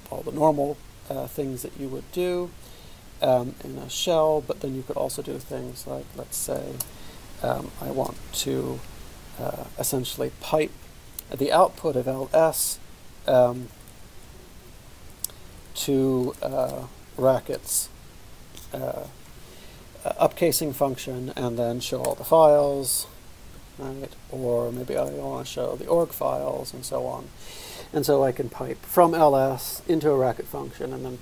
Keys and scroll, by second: 0.0-0.5 typing, 8.1 typing, 13.3-18.2 typing, 22.2 Return, 24.2 alt+p, 25.0-26.1 typing.